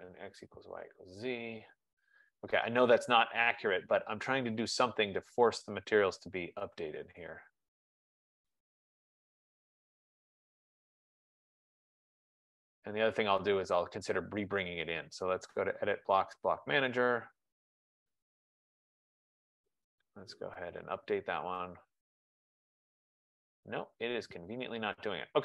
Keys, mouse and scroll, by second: 0.8 click, 5.4 click, 6.7 click, 10.0 click, 14.6 click, 18.1 click, 21.1 click, 24.2 click.